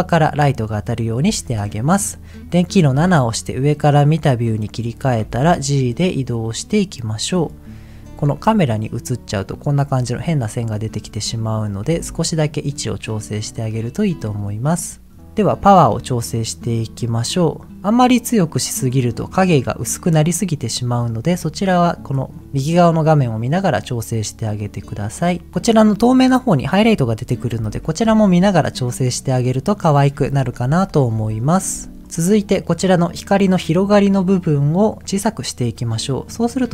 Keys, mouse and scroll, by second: 0.6 middle click, 2.9 KP_7, 5.2 g, 7.3 click, 11.0 r, 11.7 click, 11.8 g, 13.6 click, 15.2 middle click, 16.7-18.8 drag, 21.1 click, 23.8-25.5 drag, 27.5 h, 28.2 ctrl+z, 30.6 KP_7, 31.6 r, 35.2-36.7 drag.